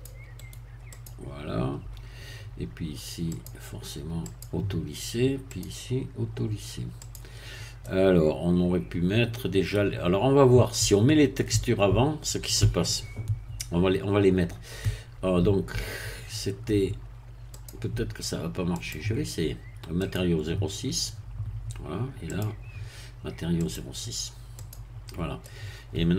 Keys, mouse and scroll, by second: 0.4 right click, 0.9-2.3 drag, 3.3 click, 4.2 click, 5.4 click, 7.0 click, 7.8-12.9 middle drag, 17.5 click, 18.7 click, 20.0 click, 22.2 click, 23.6 click, 24.7 click, 25.4-26.1 middle drag.